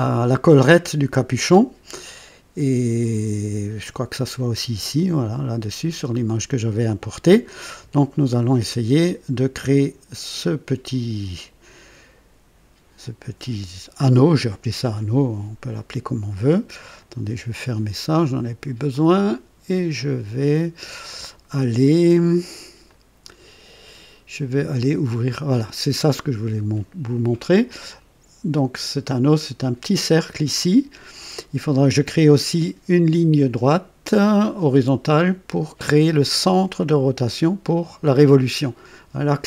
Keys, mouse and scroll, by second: 3.8 click, 8.3 click, 16.9 click, 18.9 click, 22.8 click, 25.2 click.